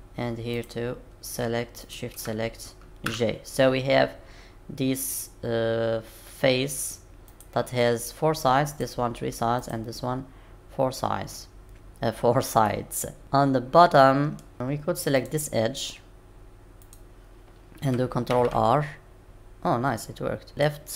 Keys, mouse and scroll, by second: 0.5 click, 1.8 shift+click, 3.1 j, 6.8 click, 7.3 click, 8.7 click, 9.6 click, 12.6 middle click, 14.5-15.1 scroll up 1, 15.1 click, 16.8 click, 18.3 ctrl+r.